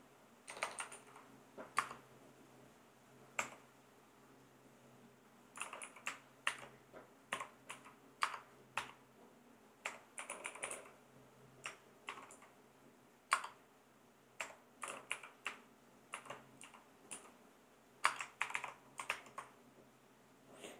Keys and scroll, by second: 0.5 BackSpace, 0.9 super+Right, 1.8 space, 3.4 \, 5.5-11.1 typing, 7.7 Right, 12.3-16.6 typing, 17.1 Right, 18.0 space, 18.4 shift+4, 19.1 ctrl+Return.